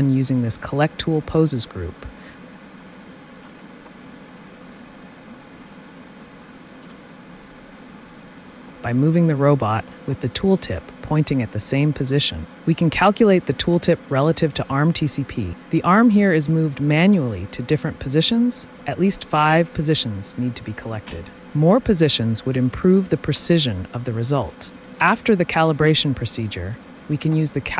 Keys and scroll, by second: 6.8 t, 25.8 t.